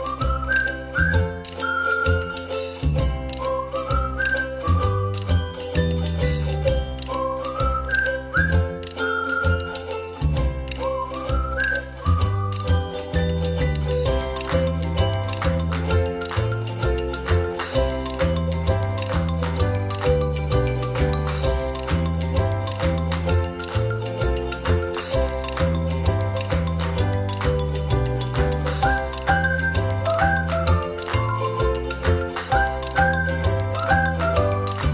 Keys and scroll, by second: 1.3 o, 3.2 space, 24.3 o, 27.0 ctrl+j, 27.4 space, 28.3 ctrl+-, 28.5 ctrl+-, 31.5 Delete.